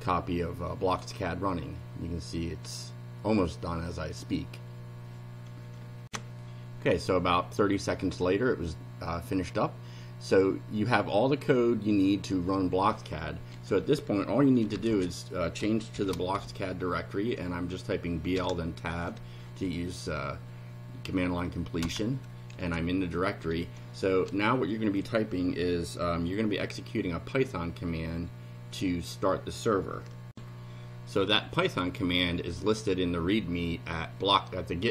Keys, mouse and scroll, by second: 6.1 ctrl+r, 14.4-16.4 typing, 18.4 Tab, 21.8 Return, 30.3 ctrl+r.